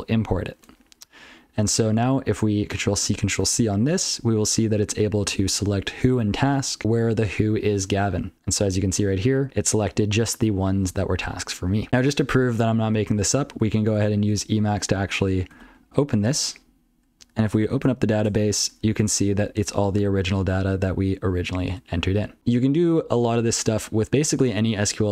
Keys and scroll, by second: 0.6 ctrl+g, 0.7 ctrl+n, 1.2-1.6 ctrl+f, 1.7 ctrl+p, 2.0 ctrl+n, 3.4 ctrl+c, 4.2 ctrl+n, 4.4 ctrl+n, 4.7 ctrl+n, 4.8 ctrl+p, 5.0 ctrl+p, 5.1 ctrl+p, 5.4 ctrl+n, 6.0 ctrl+f, 6.2 ctrl+f, 8.1 ctrl+n, 8.3 ctrl+n, 8.3 ctrl+n, 8.6 ctrl+a, 8.9 ctrl+space, 9.1 ctrl+n, 9.3 ctrl+n, 9.5 ctrl+g, 9.7 ctrl+p, 9.9 ctrl+g, 10.0 ctrl+p, 10.5 ctrl+p, 10.8 ctrl+space, 11.0 ctrl+n, 11.2 ctrl+n, 11.6 ctrl+g, 11.8 ctrl+n, 12.5 ctrl+n, 12.8 ctrl+n, 13.9-14.3 ctrl+f, 15.6 ctrl+o, 17.1 ctrl+n, 17.8 Tab, 18.2 Return, 18.6 Tab, 18.7 ctrl+n, 19.1 Return, 20.0 ctrl+p, 20.3 ctrl+n, 22.4 ctrl+n, 23.0 ctrl+n, 23.5 ctrl+p, 23.8 ctrl+n, 24.0 ctrl+a, 24.2 ctrl+n.